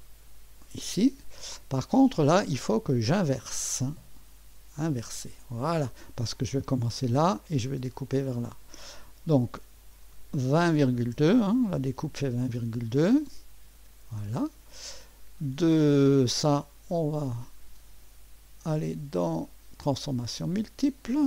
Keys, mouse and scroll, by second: 0.0 click, 4.8 click, 9.3 click, 10.7-12.4 typing, 13.7 Return, 16.3 click, 20.4 click.